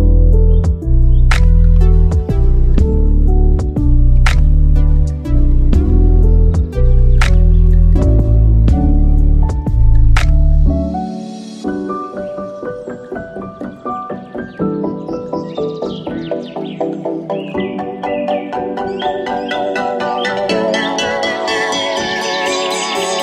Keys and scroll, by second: 14.9 f, 15.9 f.